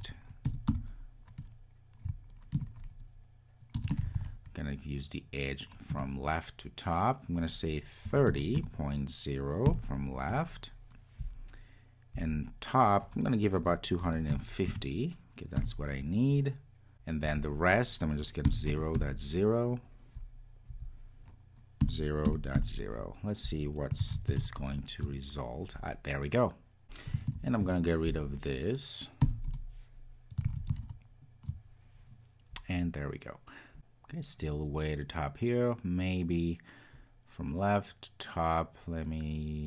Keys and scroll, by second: 3.1 Return, 24.1 super+s, 30.5 super+s.